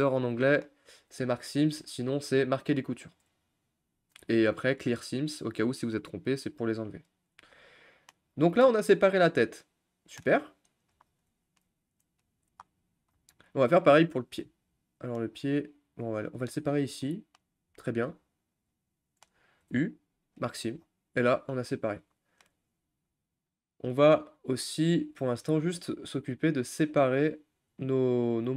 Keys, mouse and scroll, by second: 0.3 middle click, 0.7-3.6 scroll up 2, 3.6-7.6 scroll up 1, 7.6 scroll down 2, 7.9 middle click, 8.3 scroll down 2, 8.5 scroll up 1, 8.6-11.1 middle drag, 11.1-11.4 scroll down 5, 11.4-12.6 shift+middle drag, 12.6-13.7 scroll up 11, 14.7 scroll down 1, 14.8 middle click, 15.3-16.0 scroll down 3, 16.0 click, 17.0 middle click, 17.5-18.2 scroll down 3, 17.8 shift+middle click, 18.2-20.5 middle drag, 20.5 u, 20.8-21.3 scroll down 6, 21.3 click, 21.6 middle click, 22.5-22.8 shift+scroll down 3, 22.8-25.8 middle drag, 25.8-26.6 scroll down 2, 26.6-27.4 scroll up 1, 27.4-27.8 scroll up 1, 27.8-28.5 shift+middle drag.